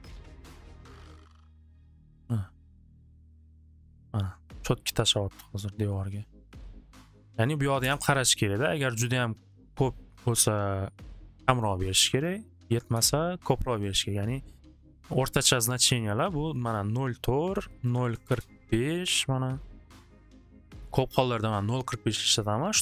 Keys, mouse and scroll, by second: 0.3 click, 0.4 6, 0.6 Return, 1.6 Return, 1.6-5.4 drag, 3.2-4.2 middle drag, 7.4 click, 7.5 click, 7.8 Return, 9.6 Return, 9.6-11.5 drag, 11.5 3, 12.2 click, 12.4 Return, 12.6 Return, 14.2 click, 16.6 click, 17.6-18.5 typing, 17.8 click, 21.7-22.8 drag, 22.2-22.8 typing.